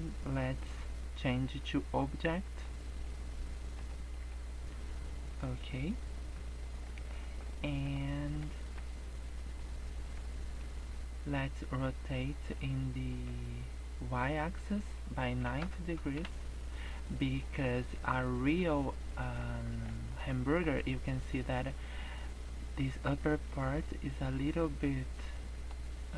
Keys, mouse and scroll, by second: 1.3 click, 3.0 scroll down 1, 3.1 middle click, 4.0 scroll down 4, 4.1 middle click, 4.5 scroll up 2, 4.9 middle click, 5.5 scroll up 1, 6.8 shift+middle click, 7.6 middle click, 7.9-8.4 scroll up 4, 8.4 shift+middle click, 8.9 middle click, 10.2 shift+middle click, 10.7-11.3 scroll up 5, 12.6 shift+middle click, 14.3 click, 17.4 middle click, 17.9 shift+middle click, 18.8 scroll down 5, 19.1 middle click, 19.4 scroll up 4, 19.9 shift+middle click, 20.4 middle click, 21.6 middle click, 24.0 middle click, 25.0 scroll up 1, 25.3 middle click.